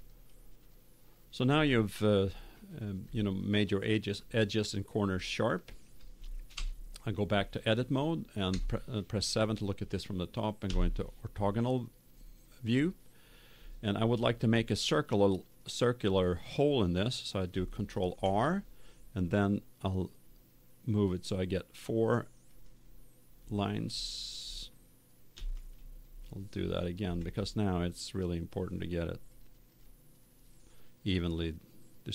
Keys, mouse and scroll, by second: 0.0 click, 0.2 click, 0.5 click, 1.2 middle click, 1.7-4.9 middle drag, 5.1-6.5 middle drag, 6.5 Tab, 8.5 KP_7, 10.6 KP_5, 18.0 ctrl+r, 24.0-25.9 drag, 25.3 ctrl+z, 27.0 ctrl+r, 29.8-31.3 drag.